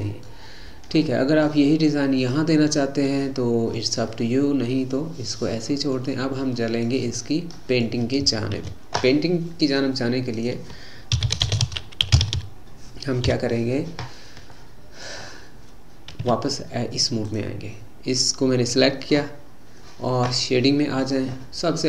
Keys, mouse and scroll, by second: 0.4-1.0 scroll down 2, 1.0-2.3 middle drag, 2.3 click, 4.1-8.9 middle drag, 8.9 ctrl+s, 14.6 middle click, 15.3-16.2 scroll down 3, 16.2 Tab, 17.3 click.